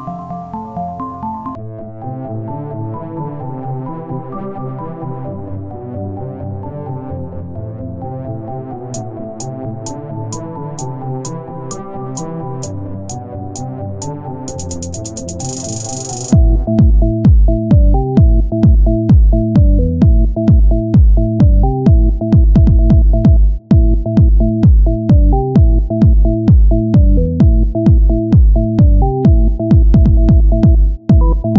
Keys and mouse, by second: 0.9 r, 2.7 e, 4.9 click, 5.3-7.3 right drag, 5.7-7.3 drag, 7.5 click, 7.8 right click, 8.5 z, 8.9 c, 9.5-11.1 drag, 9.5 z, 13.2 click, 13.8 KP_1, 15.0 r, 17.3 e, 19.6 click, 20.4 ctrl+z, 21.0 o, 22.2 click, 25.3 e, 28.9 e, 30.1-31.5 drag.